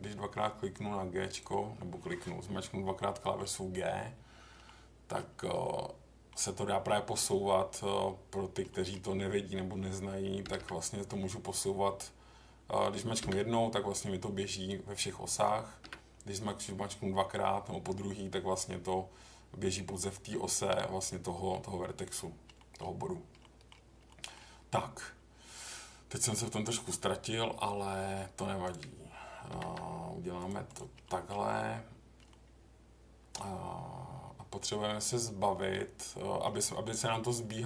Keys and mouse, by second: 1.3 click, 3.1 middle click, 4.6 middle click, 5.6 middle click, 8.7 middle click, 10.4 g, 10.6 g, 13.2 g, 15.8 g, 21.9 click, 22.5 middle click, 23.4 middle click, 24.1 middle click, 28.7 click, 29.5 g, 29.6 g, 31.0 middle click, 32.3 middle click, 33.2 middle click, 35.7 middle click.